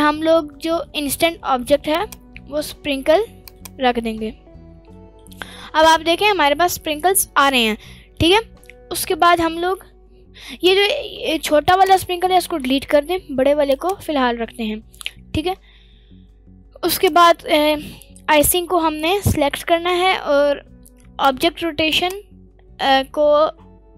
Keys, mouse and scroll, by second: 0.8-1.1 middle drag, 1.9 click, 3.9 middle click, 4.7 scroll up 1, 4.9 middle drag, 5.4-6.0 scroll up 4, 6.0 middle click, 6.4 scroll down 1, 6.6-7.1 middle drag, 8.9-9.3 scroll down 2, 11.6 click, 11.6 scroll down 2, 12.5 Delete, 13.6 click, 16.8 click, 18.1-18.6 scroll down 1, 18.6-19.3 scroll up 1, 19.3-20.0 scroll up 1, 20.6-21.5 scroll up 1, 21.5 click, 22.2 click.